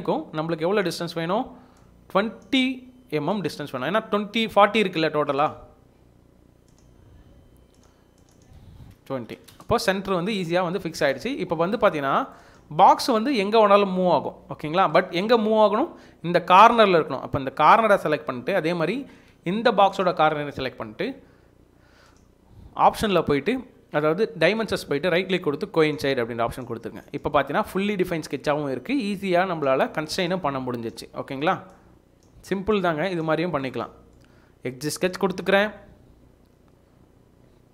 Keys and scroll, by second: 0.5 Escape, 8.9-9.8 typing, 10.1 Return, 30.9 Escape, 31.2 Escape, 31.5 Escape.